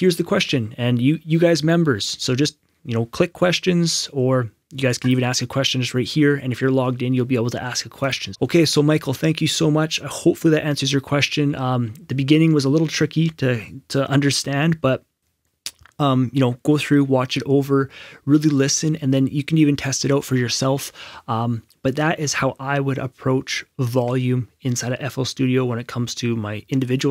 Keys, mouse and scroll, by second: 0.0 scroll up 1, 5.0 scroll up 1, 5.0 click, 8.0 click, 9.9 click, 10.0 scroll down 1, 11.5 scroll up 1.